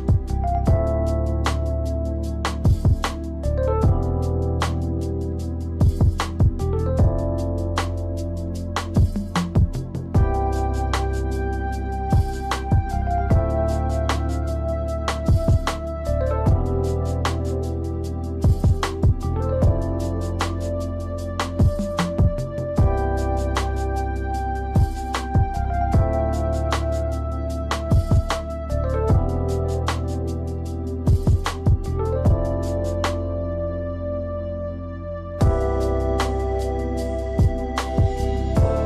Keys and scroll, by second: 7.4 space, 8.4 space, 10.1 space, 11.1 space, 12.1 space, 15.0 space, 21.7 space, 26.9 space, 27.6 space, 28.5 space, 34.0 space, 34.8 space, 35.5 space, 36.3 space.